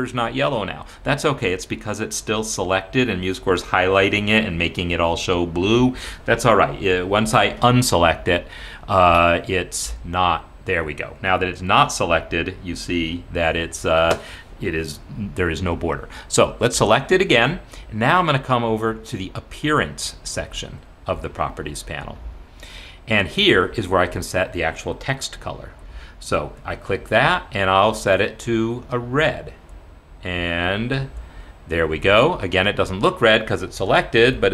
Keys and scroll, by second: 8.2 Escape, 34.1 Escape, 34.3 Escape.